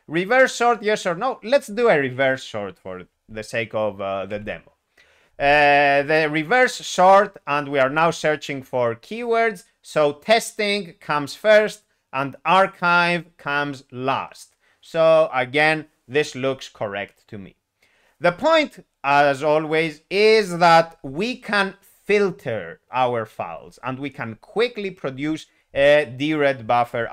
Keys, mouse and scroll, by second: 4.3 y, 27.0 alt+x.